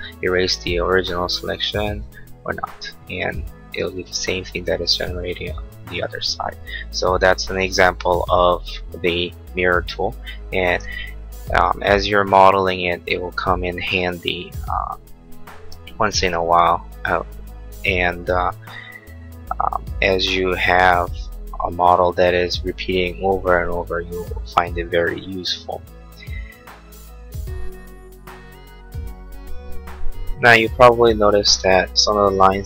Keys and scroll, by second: 3.7 space.